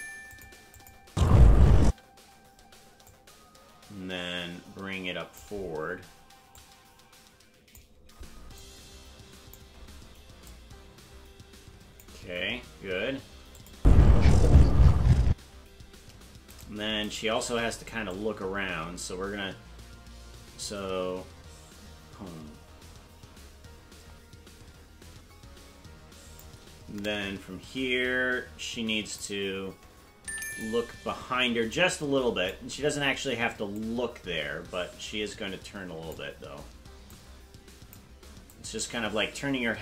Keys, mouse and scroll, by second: 0.7 click, 1.0 space, 3.1-5.5 drag, 6.5-7.8 drag, 8.6 click, 10.4-12.0 drag, 13.6 click, 13.7 space, 15.3 space, 16.6 right click, 17.1 shift+right click, 18.1-26.5 drag, 27.1-29.2 drag, 30.2 i, 31.7 click, 33.7-36.2 drag, 37.1 click, 38.5-39.8 drag.